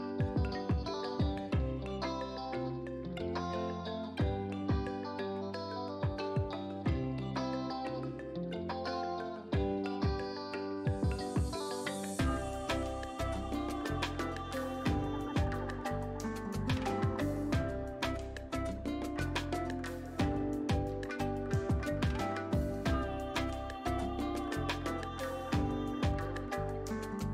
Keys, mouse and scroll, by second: 0.7 scroll up 1, 4.9 scroll down 1, 14.4-27.3 drag.